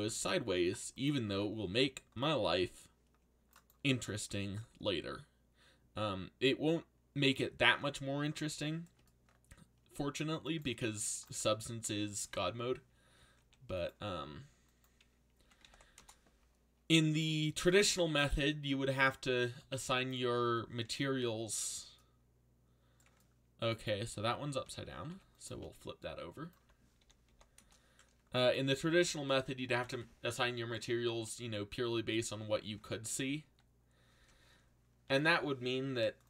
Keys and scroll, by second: 1.7 c, 4.1-5.0 typing, 8.1 a, 10.7 c, 13.4 r, 15.1-16.2 typing, 20.7 c, 24.1 ctrl+z, 25.1 r, 26.3-27.7 typing, 29.7 ctrl+l, 33.1 ctrl+z, 35.0 ctrl+l, 35.9 r.